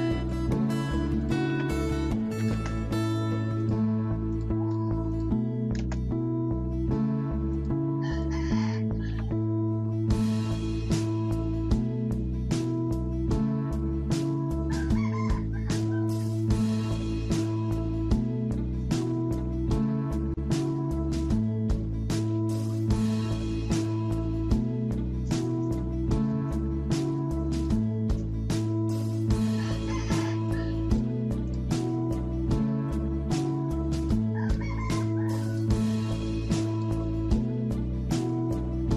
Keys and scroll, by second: 0.8-2.9 typing, 9.1 Escape.